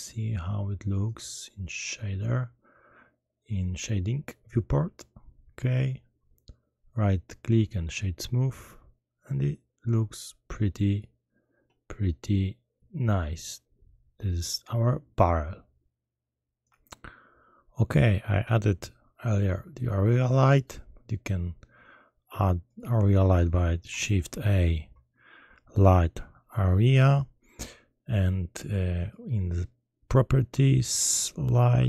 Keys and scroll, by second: 24.2 shift+a.